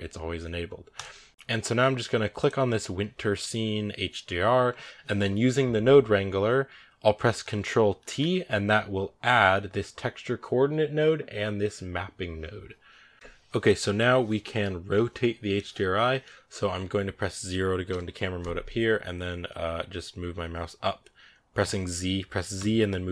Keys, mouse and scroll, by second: 1.3 x, 2.2 click, 7.9 ctrl+t, 13.1 click, 17.7 KP_0, 18.6-19.5 scroll down 6, 19.8 scroll up 2, 20.3 z, 21.4 z, 22.7 z.